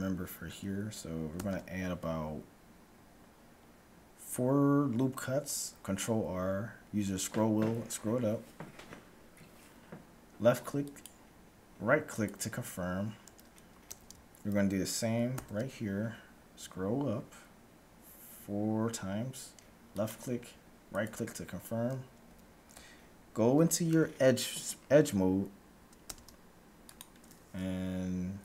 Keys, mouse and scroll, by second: 1.4 ctrl+r, 13.9 a, 15.3 ctrl+r, 22.3 a, 26.1 ctrl+Tab.